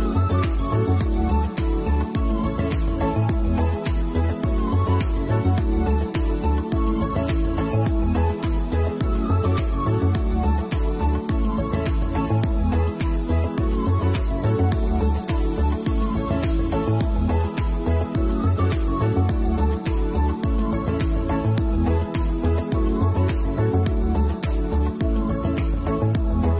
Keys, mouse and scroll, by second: 2.1 click, 5.4 middle click, 5.9 scroll up 3, 6.4 scroll up 2, 12.7 middle click, 13.2-15.3 scroll up 2, 15.4 scroll up 1, 15.9 middle click, 17.0 click, 17.5 scroll up 3, 17.8 middle click, 19.8 k.